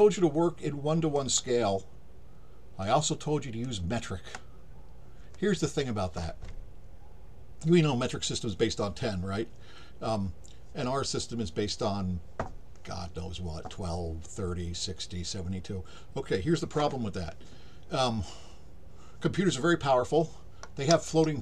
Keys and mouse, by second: 2.8 click.